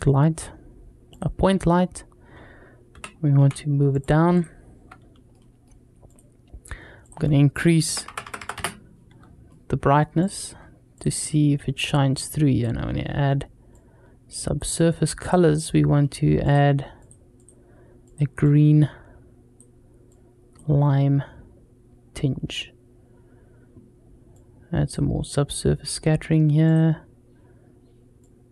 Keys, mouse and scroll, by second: 2.7 g, 4.1 click, 5.2-5.5 middle drag, 5.9 click, 6.8-8.8 drag, 8.0 KP_0, 8.2 KP_0, 9.3-9.8 middle drag, 10.0 drag, 10.4 scroll up 1, 10.8 drag, 12.0 click, 13.5 click, 15.4 click, 16.3 click, 17.2 click, 24.1 click, 26.5-28.5 drag.